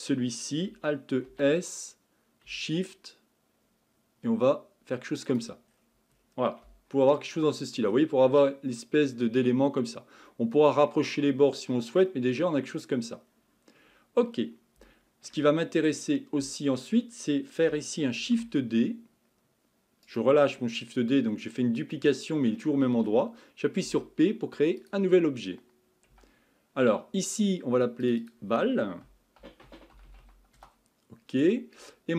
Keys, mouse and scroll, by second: 5.7-6.6 scroll down 2, 6.6 Tab, 7.1-8.2 middle drag, 8.2-9.0 scroll up 4, 9.0-10.3 scroll up 1, 10.3 middle click, 11.1-12.1 scroll down 5, 12.1-13.2 middle drag, 13.2-13.7 scroll down 2, 13.7-14.7 scroll up 4, 14.9-15.6 shift+middle drag, 15.6 scroll up 1, 16.4 Tab, 20.5-22.6 scroll down 2, 22.6-23.9 middle drag, 23.9 p, 28.0 click, 28.2-30.1 drag, 30.1 l.